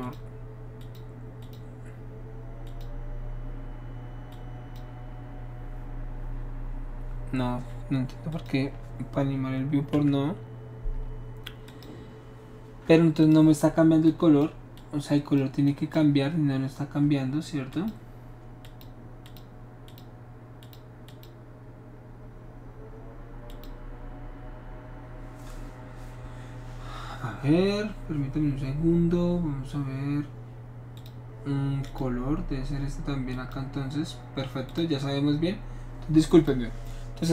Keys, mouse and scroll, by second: 0.0 click, 0.8 click, 1.4 click, 2.6 click, 4.3-4.8 drag, 8.3 click, 9.9 Delete, 11.7 click, 13.2 click, 14.1 click, 14.8 click, 15.7 click, 17.7 click, 18.6 click, 19.2 click, 19.9 click, 20.6 click, 21.1 click, 23.5 click, 31.0 click, 31.8 click, 33.3 click, 34.7 click, 36.3 click.